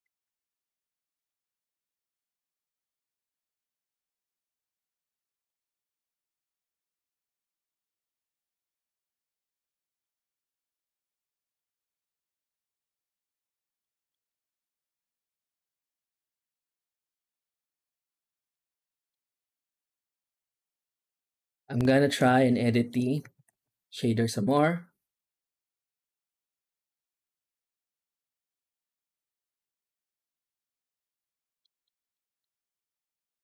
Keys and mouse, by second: 0.0 ctrl+space, 0.3 z, 3.7 z, 4.6 z, 6.0 click, 6.2 shift+d, 7.4-9.9 drag, 10.8 click, 12.4-13.6 drag, 14.0 middle drag, 14.9 alt+shift+z, 15.6 shift+middle drag, 16.6 middle drag, 18.5 middle click, 18.9 middle click, 20.9 z, 22.2-22.7 shift+middle drag, 23.2 ctrl+s, 23.5 z, 25.9 click, 31.5 middle click, 32.1 middle click, 33.2-33.4 drag.